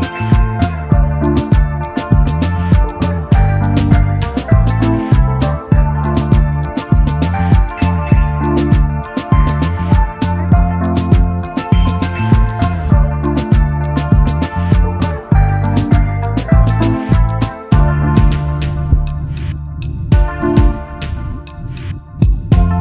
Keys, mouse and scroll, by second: 2.1 Down, 2.2 Down, 2.6 Right, 2.8 Right, 3.0 Right, 4.5 alt+scroll up 1, 5.4 double click, 7.0 alt+shift+click, 8.6 v, 10.2 shift+click, 12.0 double click, 13.7 double click.